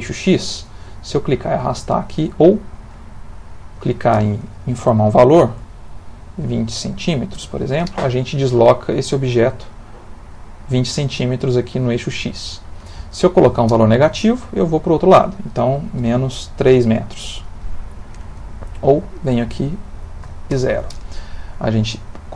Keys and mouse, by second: 0.0 click, 3.4 click, 9.7 middle click, 12.4 click, 14.8 click, 19.0 click, 21.5 middle click.